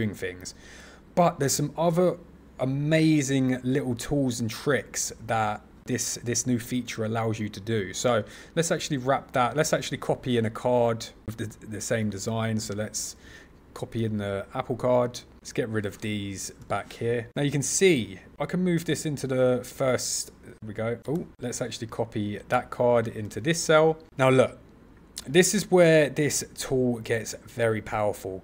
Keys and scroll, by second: 12.0 super+c, 14.0 super+v, 20.5 super+z, 21.1 shift+super+z, 22.4 super+c, 23.2 super+v.